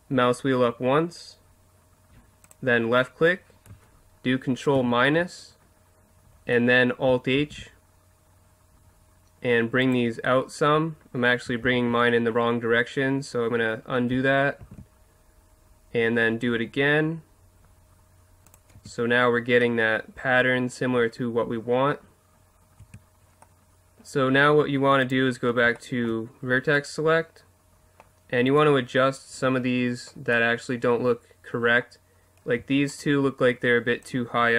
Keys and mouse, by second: 2.5-4.1 drag, 4.7 ctrl+KP_Subtract, 7.4 alt+s, 9.9-11.5 drag, 11.6 ctrl+z, 14.6 alt+s, 18.5 click, 18.7 Tab, 19.0-20.2 drag, 20.6 middle click, 20.9 middle click, 22.1 middle click, 22.8 Tab, 25.0-26.5 drag, 26.5 middle click, 27.2 middle click, 28.5-29.5 right drag, 29.3 KP_Decimal, 32.9-34.5 right drag, 34.0-34.5 drag.